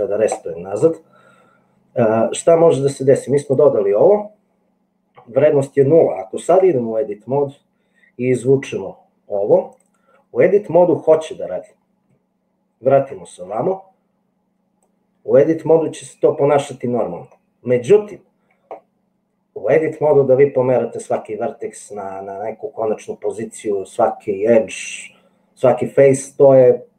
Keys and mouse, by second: 6.6 Tab, 8.6 g, 9.9-11.7 drag, 13.2 Tab, 15.0 click, 16.9 click, 17.1 click, 17.5 click.